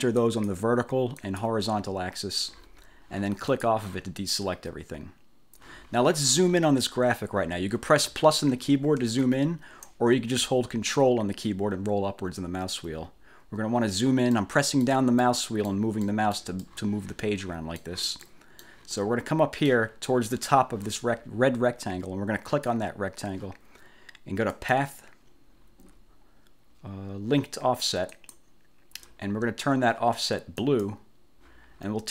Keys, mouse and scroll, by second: 0.3 click, 1.3 click, 3.6 click, 8.2 =, 9.1 -, 12.2-12.9 ctrl+scroll up 4, 14.4 click, 15.3 click, 16.2 click, 16.8-18.1 drag, 18.3 click, 19.0 click, 22.6 click, 24.6 click, 28.2 click, 30.7 click.